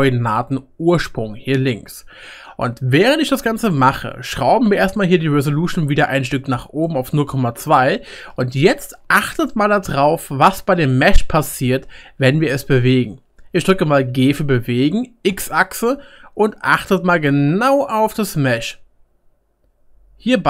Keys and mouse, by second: 5.1 click, 7.9-11.2 middle drag, 9.4-11.2 shift+drag, 9.4-11.2 shift+right drag, 14.1 g, 17.0-20.4 shift+drag, 17.0-20.4 shift+middle drag, 17.0-20.4 shift+right drag.